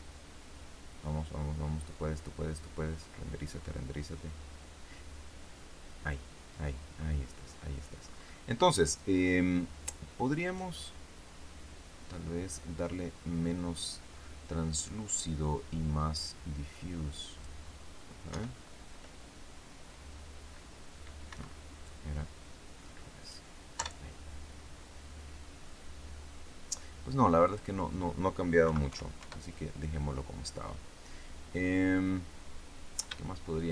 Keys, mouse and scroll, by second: 3.4-3.8 scroll down 2, 6.9-7.5 scroll up 2, 7.9-8.5 scroll up 2, 8.5 scroll down 2, 10.4 right click, 16.1-17.5 drag, 18.2 F12, 21.2 Escape, 21.7-23.4 drag, 23.7 F12, 27.3 click, 28.5 KP_Decimal, 28.8 KP_5, 29.1 KP_Enter, 31.1 scroll down 1, 31.9 scroll down 1, 33.1-33.7 shift+middle drag.